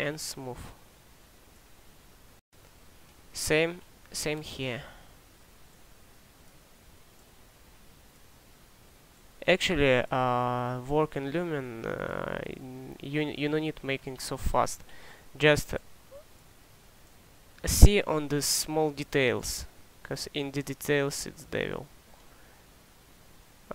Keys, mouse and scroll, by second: 5.4-8.3 drag.